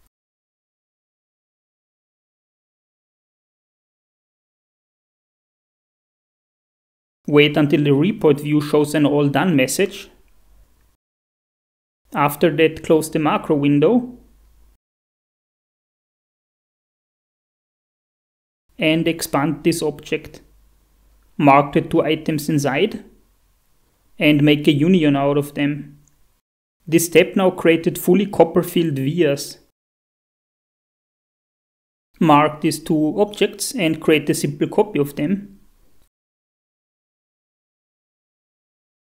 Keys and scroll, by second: 12.0 shift+F4, 26.8 shift+F4.